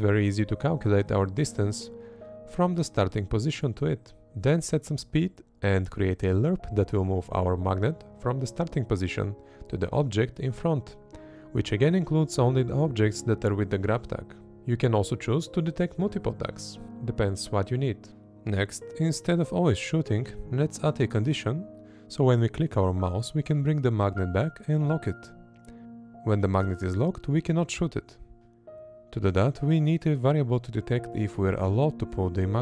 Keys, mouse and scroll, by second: 22.9 space, 24.7-26.7 drag, 27.1 space, 28.6-30.9 drag, 31.4 space.